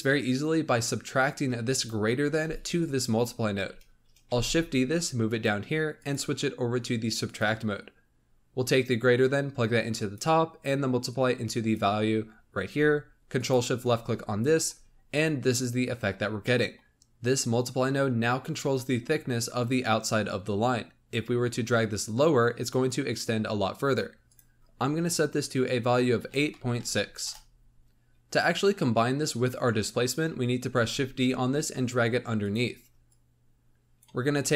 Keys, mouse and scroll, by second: 1.6 ctrl+shift+click, 4.2 shift+d, 5.9-8.8 drag, 11.0-13.4 drag, 15.9 scroll down 1, 16.4-16.9 middle drag, 21.5-27.2 drag, 27.8 click, 30.7 shift+d, 33.1 click, 34.2-34.5 scroll up 3.